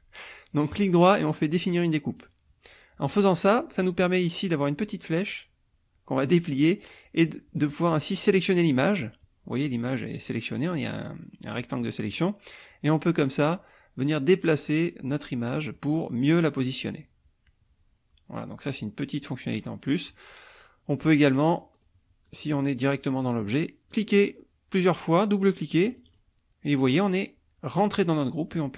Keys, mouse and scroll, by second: 0.7 right click, 2.1 click, 6.2 click, 8.3 click, 13.0-20.3 drag, 21.7 click, 22.3 click, 23.9 click, 25.9 click.